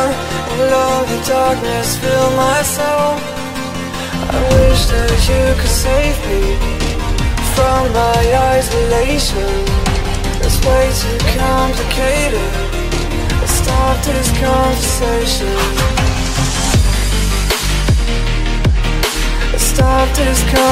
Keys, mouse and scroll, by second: 4.7 click, 5.4 click, 6.1 right click, 6.7 click, 7.0 right click, 7.6 click, 7.8 click, 9.0 click, 9.8-11.2 typing, 12.7 click, 13.5-14.2 typing, 14.6 shift+Home, 15.6-17.7 typing, 19.0 click.